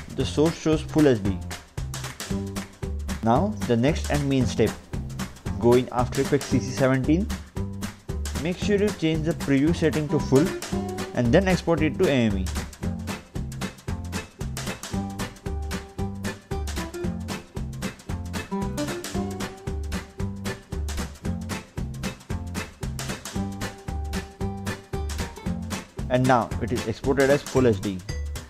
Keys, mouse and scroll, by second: 3.4 click, 4.8 click, 5.0 Delete, 5.6 Return, 7.0 click, 8.8 click, 13.1 click, 14.5 click, 16.5 click, 17.4 click, 18.5 click, 19.3 click, 20.6 click, 25.7 click.